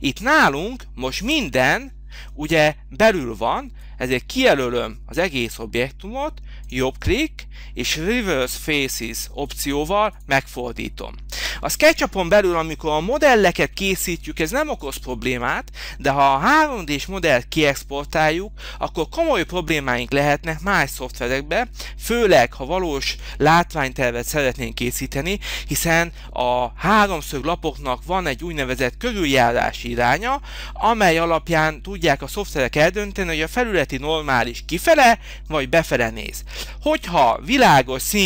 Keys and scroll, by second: 13.6 h.